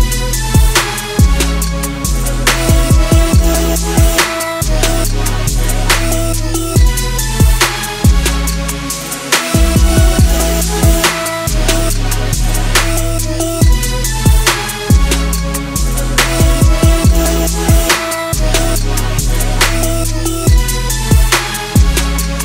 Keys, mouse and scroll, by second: 1.0 click, 9.4 click, 17.6 click, 20.2 click.